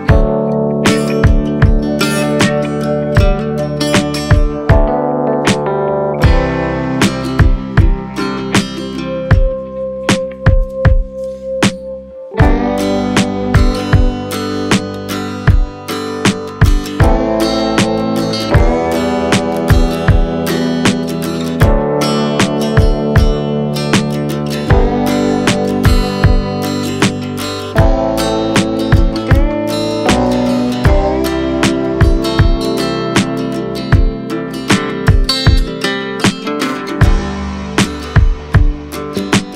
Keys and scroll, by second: 0.0 space, 0.7 space, 1.9 space, 3.3 space, 3.8 space, 4.6 space, 6.1 space, 8.6-11.4 typing, 18.6 b, 20.0 5, 20.3 ], 21.4 x, 23.3 [, 23.9 [, 25.6 ], 28.6-31.1 typing, 34.3 super+[, 35.7-38.3 typing, 39.4 space.